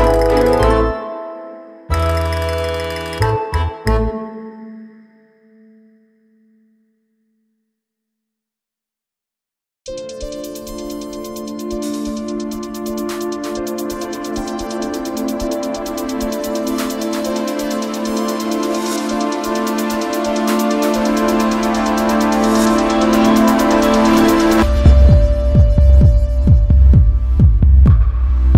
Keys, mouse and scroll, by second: 8.1 click, 9.0 click, 23.0 click, 24.2 click, 25.1 click.